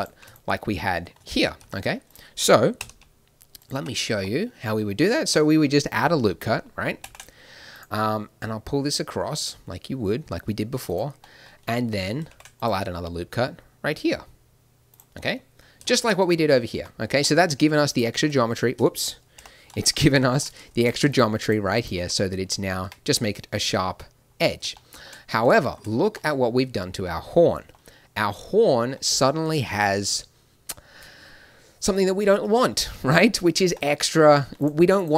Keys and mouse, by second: 1.1 a, 1.6 b, 2.7 n, 3.5 click, 3.7 n, 4.2 click, 7.0 ctrl+r, 12.2 ctrl+r, 16.7 a, 17.8 click, 18.4 click, 19.3 o, 20.7-22.5 drag, 22.8 Tab, 29.2-32.8 middle drag, 33.6 Tab, 34.5-35.1 right drag.